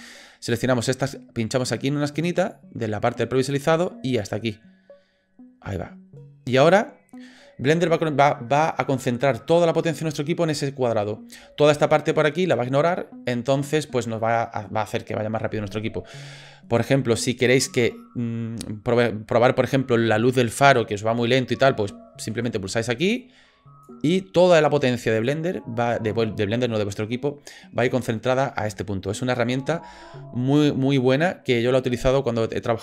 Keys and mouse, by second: 22.2 ctrl+b, 29.6 ctrl+b.